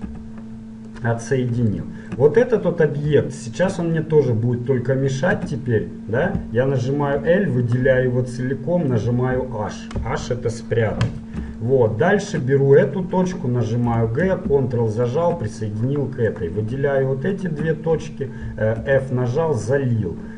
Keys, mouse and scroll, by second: 0.0 v, 1.4-2.8 middle drag, 3.6 middle click, 3.8-7.2 middle drag, 5.6 a, 7.2 l, 9.1 h, 11.8 middle click, 12.9-14.9 right drag, 14.0 g, 16.4-19.2 right drag, 18.8 f.